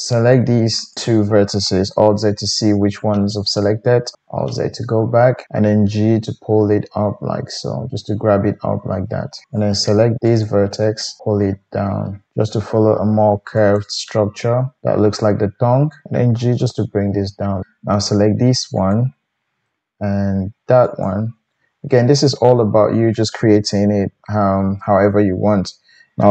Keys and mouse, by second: 0.9 shift+drag, 1.9 alt+z, 1.9-3.0 alt+middle drag, 4.1 alt+z, 5.7 g, 9.5 click, 10.4-18.9 middle drag, 11.2 g, 16.1 click, 16.5 g, 18.9 click, 19.0-20.8 middle drag, 20.8 shift+click, 21.0-26.3 shift+middle drag, 23.7 KP_1.